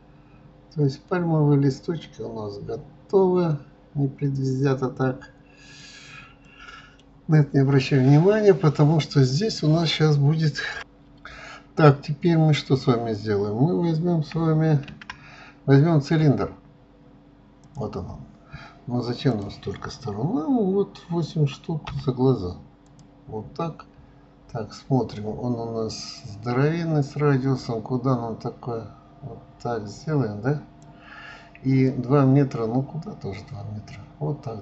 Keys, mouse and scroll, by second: 6.0-6.4 scroll down 2, 6.4-7.8 middle drag, 7.8-8.4 scroll down 2, 8.4-10.0 middle drag, 11.9-12.3 scroll down 1, 12.3-12.7 scroll up 2, 14.9 shift+a, 19.3-22.3 drag, 24.0-26.2 scroll down 4, 26.2-29.2 drag, 31.9-34.6 drag.